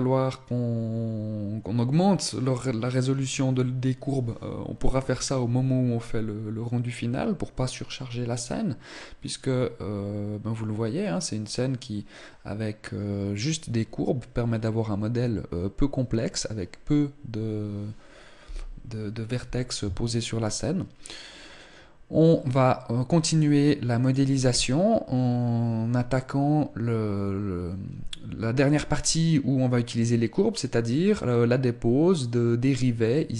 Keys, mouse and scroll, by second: 23.8 click.